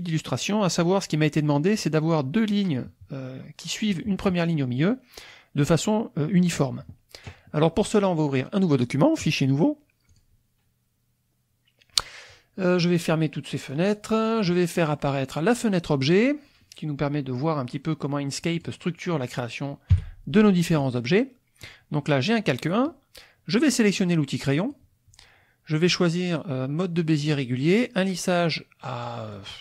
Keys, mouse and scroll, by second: 9.3 click, 10.2-11.2 drag, 12.8 scroll up 2, 13.5-14.5 drag, 15.5 click, 16.2 click, 17.4-18.8 drag, 19.9 KP_5, 20.8-21.8 middle drag, 24.6 click, 24.9-26.7 middle drag, 29.0 click.